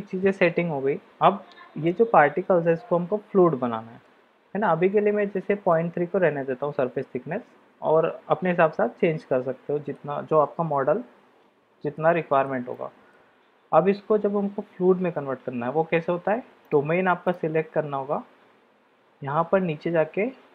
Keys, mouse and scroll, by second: 4.0-4.6 middle drag, 5.3-5.6 middle drag, 9.1-10.0 middle drag, 11.9-12.5 shift+middle drag, 12.7 middle click, 16.6-20.5 drag.